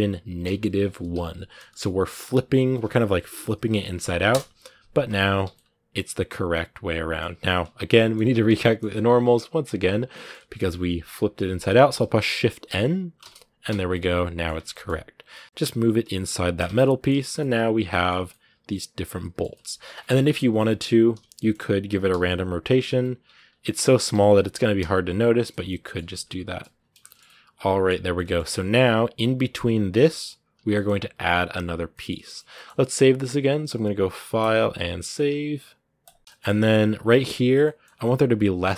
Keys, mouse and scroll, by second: 5.3-8.0 middle drag, 8.0 scroll up 1, 8.2 Tab, 8.4-13.0 middle drag, 13.0 shift+n, 13.7 middle click, 14.3 Tab, 14.5 middle click, 15.1 g, 16.4 Tab, 16.5 scroll down 2, 16.6 middle click, 16.9 a, 17.2-19.5 middle drag, 19.5-20.2 scroll up 3, 19.7 Tab, 20.2 right click, 20.9 l, 21.1 middle click, 21.7 r, 23.0 Tab, 23.3 right click, 23.9 l, 25.3 scroll down 2, 25.4 middle click, 25.8 a, 25.9 scroll up 1, 25.9 middle click, 26.4 a, 26.5 scroll down 2, 26.8-29.6 shift+middle drag, 29.6 scroll down 3, 29.7 middle click, 30.3 right click, 30.5-36.2 middle drag, 36.2 scroll up 2, 37.4-38.5 shift+middle drag, 38.5 scroll down 2, 38.6 shift+middle click.